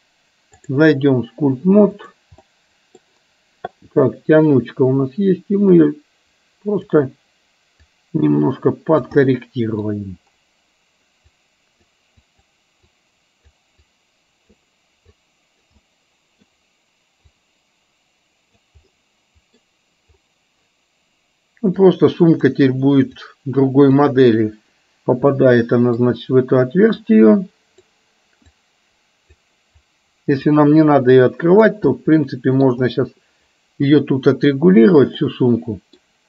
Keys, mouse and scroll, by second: 2.1 click, 2.4 middle click, 5.8-6.9 drag, 7.9-9.2 drag, 9.3 middle click, 11.4 click, 13.1 click, 13.9 click, 15.3 click, 15.8 middle click, 17.4-18.7 drag, 18.9 middle click, 21.8 click, 23.2 click, 25.4 middle click, 27.1 click, 28.7 click, 29.9 click, 31.3 click, 31.9 middle click, 35.3 middle click.